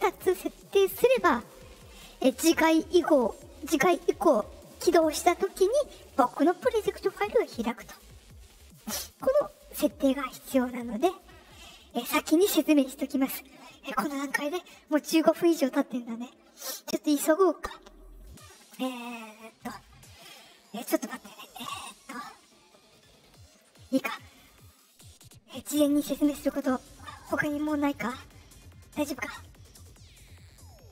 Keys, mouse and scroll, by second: 1.8 click.